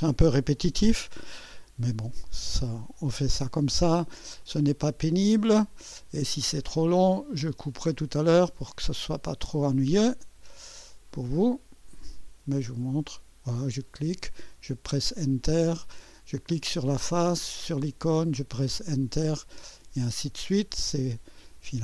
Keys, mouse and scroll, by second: 0.4 click, 2.3 Return, 2.9 click, 4.4 click, 5.0 Return, 5.9 click, 7.1 click, 7.9-8.5 drag, 8.2-9.0 typing, 8.8 click, 10.0 click, 10.4 Return, 12.1 click, 13.1 click, 14.5 Return, 14.9-16.0 drag, 16.9 click, 17.5-18.3 typing, 17.8 click, 18.6 Return, 19.3 click, 20.4 click, 21.5 click.